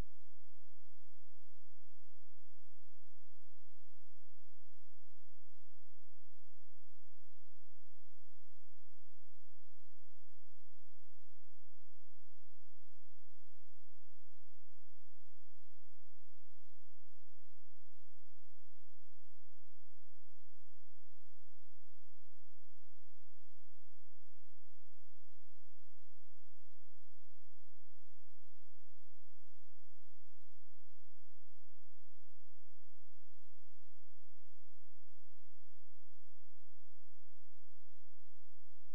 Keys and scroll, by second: 5.8 shift+a, 7.8 ctrl+space.